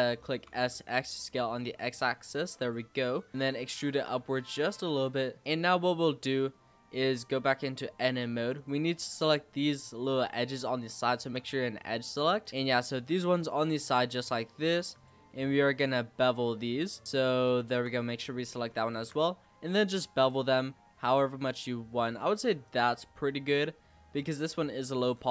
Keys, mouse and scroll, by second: 0.4 s, 3.3 click, 3.4 e, 5.4-6.9 shift+middle drag, 6.9 Tab, 8.5 click, 8.8 z, 9.9 click, 10.5 shift+click, 11.0 shift+click, 11.3 scroll down 2, 11.6-13.0 middle drag, 13.0 shift+click, 13.3 shift+click, 13.7 middle click, 14.5 shift+click, 14.9 shift+click, 15.7 shift+click, 16.1 shift+click, 16.5 shift+click, 16.9 shift+click, 17.0 middle click, 17.5 shift+click, 17.9 middle click, 18.3-18.9 scroll up 1, 18.9 ctrl+b, 22.2 Tab, 22.4 scroll down 3, 22.6 click, 22.8-24.7 middle drag, 24.7 scroll down 2, 24.9 click, 25.2-25.3 scroll up 9.